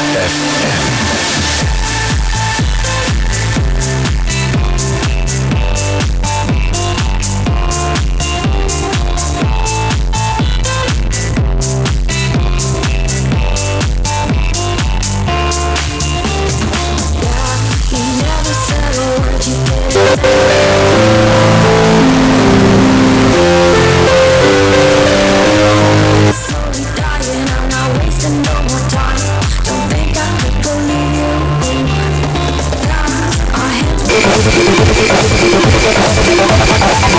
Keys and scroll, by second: 26.2 Page_Down.